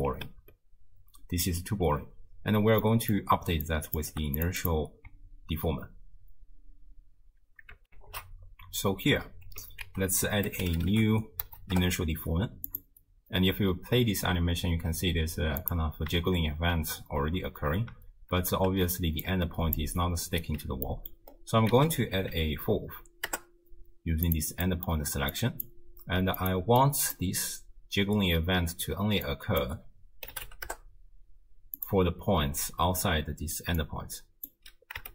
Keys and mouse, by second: 0.2 shift+space, 1.8 space, 2.9 click, 3.7 click, 4.1 g, 4.6 click, 7.9 ctrl+alt+shift+q, 9.9 ctrl+a, 13.6 space, 14.9 space, 15.6 click, 16.2 shift+space, 18.6-20.9 typing, 19.3 click, 20.2 click, 20.9 middle click, 21.8 ctrl+a, 24.7 middle click, 25.4 click, 26.4 click, 26.8 click, 29.3-30.4 drag, 30.4-31.9 right drag, 33.9-34.5 right drag.